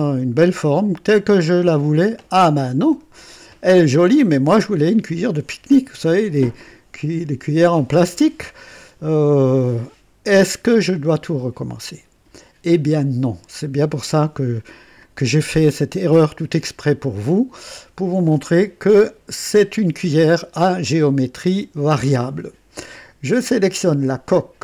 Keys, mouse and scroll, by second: 2.9 right click, 14.9-16.5 drag, 17.0-18.0 drag, 18.3-19.8 drag, 20.3 right click, 21.1 scroll down 1, 21.7 right click, 23.7 click.